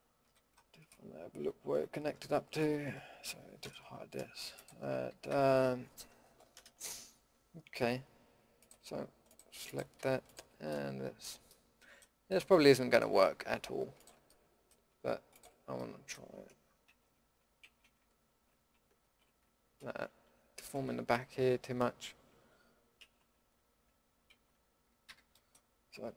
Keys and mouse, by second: 0.2 l, 2.1 l, 3.6 h, 5.3 a, 10.7-12.5 middle drag, 13.9-15.7 middle drag, 16.8 ctrl+x, 17.6 ctrl+z, 18.2 ctrl+x, 19.0 ctrl+z, 19.8 ctrl+x, 21.1 ctrl+z, 23.0 ctrl+x, 24.3 ctrl+z, 25.0 a.